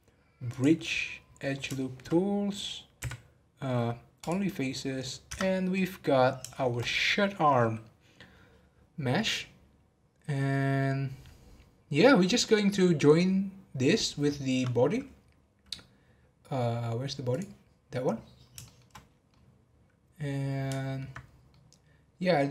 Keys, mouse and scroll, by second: 1.2-1.7 scroll up 1, 1.7-3.0 shift+middle drag, 3.0 x, 4.7-5.2 scroll down 3, 5.2 Tab, 5.7-10.2 middle drag, 17.3 click, 17.8 scroll up 1, 18.6 shift+middle drag, 18.9 scroll down 2, 19.3-21.2 middle drag, 21.2 scroll up 5, 21.5-22.5 middle drag.